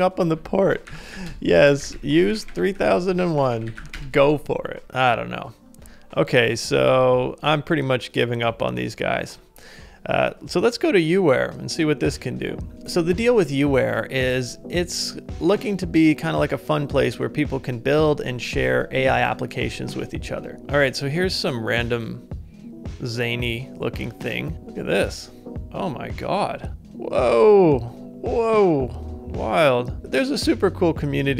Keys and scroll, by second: 0.7-1.6 typing, 3.7 typing, 6.9 super+Tab.